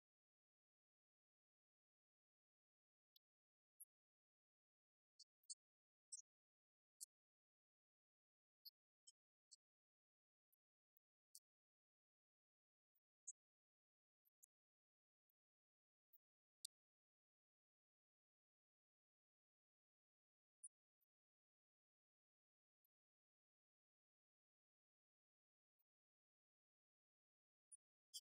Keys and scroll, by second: 11.5 Up, 12.4 Right, 20.0 Right, 22.0 Right, 22.6 Left, 26.0 Left, 26.9 Right, 27.2 9, 27.8 Right.